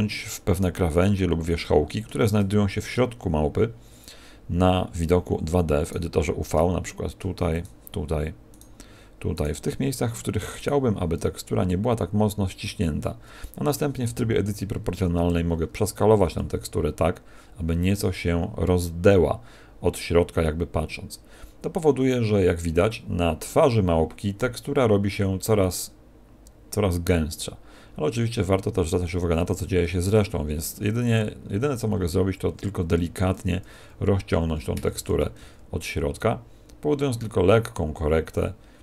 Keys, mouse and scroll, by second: 0.1 shift+middle click, 0.1-0.7 scroll up 2, 0.7 scroll up 2, 1.5 shift+middle click, 5.8 right click, 7.5 shift+right click, 11.1 scroll down 1, 12.4 scroll down 2, 14.0 o, 16.5 s, 30.6 s, 33.7 s, 35.3 s.